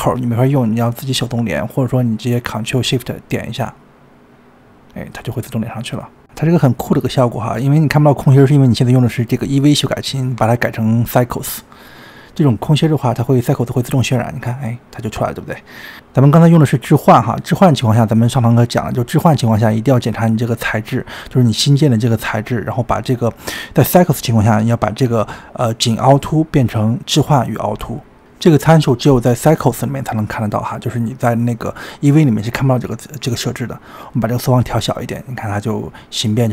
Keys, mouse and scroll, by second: 3.4 ctrl+shift+click, 3.9 ctrl+shift+click, 5.4-6.7 middle drag, 6.7-7.2 scroll up 4, 7.2-8.4 middle drag, 8.4-10.1 scroll up 2, 10.1 click, 10.9-13.8 drag, 13.8-16.2 middle drag, 16.2-16.8 scroll up 2, 16.8-18.4 scroll down 2, 18.5-19.0 scroll down 4, 19.0-20.5 middle drag, 20.6-22.5 scroll up 22, 22.6 click, 22.9-24.5 scroll down 23, 24.5-24.9 drag, 24.9-25.7 scroll down 4, 25.7-27.8 drag, 28.2-28.9 scroll up 1, 28.9-30.7 scroll up 14, 30.7-35.6 drag, 35.6-36.5 middle drag.